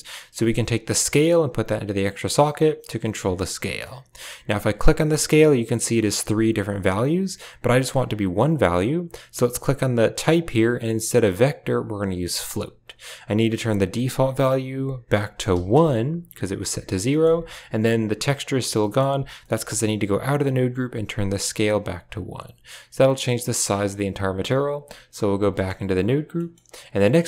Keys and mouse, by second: 0.9-2.0 drag, 4.7 click, 10.1-12.4 drag, 13.9-15.7 drag, 17.0 middle drag, 18.7 middle click, 19.3 middle drag, 20.0 Tab, 21.1 click, 22.1-23.2 drag, 23.6 click, 24.5 Tab, 25.4 middle click, 25.9 right click, 26.2 middle click, 27.0 g.